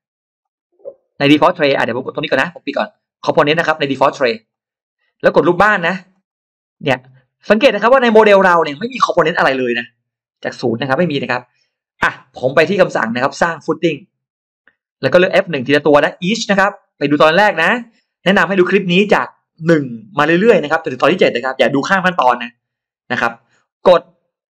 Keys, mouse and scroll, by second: 0.2 click, 1.8 click, 3.0 click, 4.3 click, 5.8 click, 6.0 click, 6.1 click, 6.2 click, 13.4 click, 15.6 click, 17.4 click.